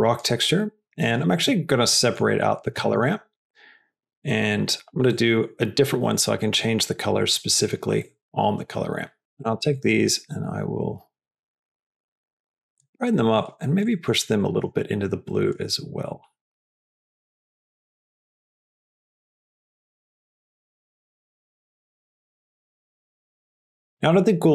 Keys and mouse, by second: 0.6 click, 1.3 click, 2.0 middle click, 2.7 shift+d, 4.1 click, 5.0 middle click, 6.0-7.2 drag, 7.2 middle click, 7.9 middle click, 18.0 click, 18.4 click.